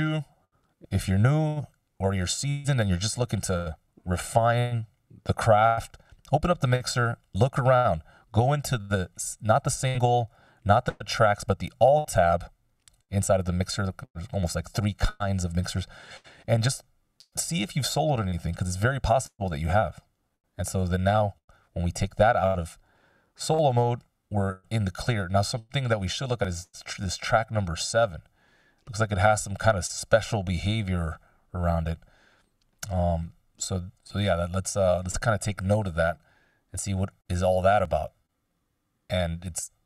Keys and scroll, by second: 6.2 x.